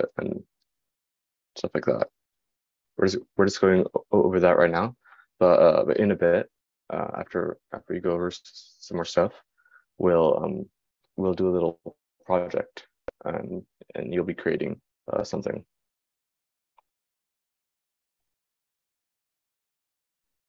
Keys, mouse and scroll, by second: 1.1-12.0 drag.